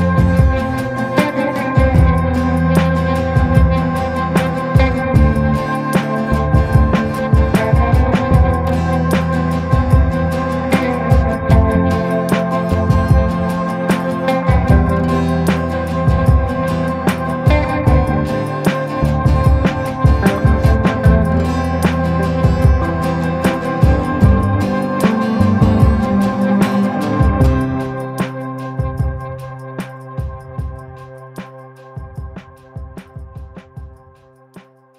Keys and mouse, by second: 1.1 shift+middle click, 5.1 ctrl+i, 5.7 b, 7.0 b, 7.7 b, 8.2 b, 8.8 b, 10.8 click, 11.0 click, 11.2 click, 12.1 click, 12.7-13.3 ], 13.4-14.5 drag, 14.7 a, 17.6 ctrl+i, 18.2 b, 19.4-21.5 typing, 25.1 click, 25.7 click, 26.7 click, 27.2-28.7 drag, 28.9 a, 32.0 middle click, 32.8 shift+middle click, 33.3 shift+middle click, 33.8 click.